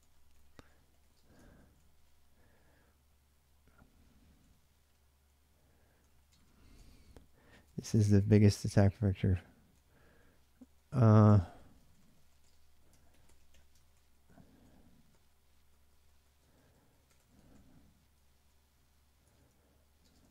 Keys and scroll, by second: 0.0-7.0 typing, 9.3-20.3 typing.